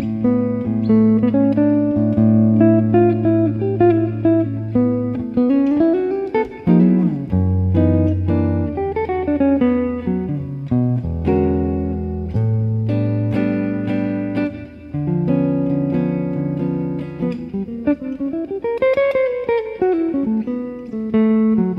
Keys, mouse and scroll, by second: 3.7 click, 5.9 a, 6.4 a, 7.4 u, 11.2 click, 12.9-18.3 middle drag, 14.1-15.7 drag, 14.1 right click, 17.5 click, 18.0 z, 18.5 z, 19.2 a, 19.9-21.7 right drag.